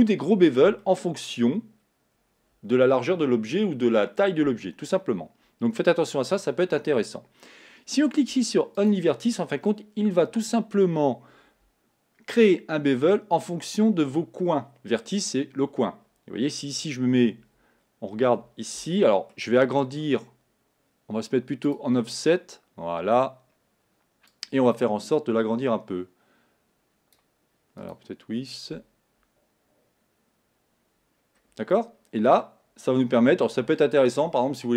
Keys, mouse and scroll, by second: 0.4-0.8 scroll down 1, 0.8-1.8 shift+middle drag, 1.8 scroll down 2, 2.0-5.0 scroll up 1, 8.8 click, 17.8-18.1 scroll up 3, 18.1-18.9 scroll down 1, 18.9-20.0 shift+middle drag, 20.0-21.7 shift+scroll up 1, 21.7 click, 24.3-27.3 drag, 27.8 click, 31.2-31.8 scroll down 2, 31.8 middle click, 32.7-33.7 scroll up 2.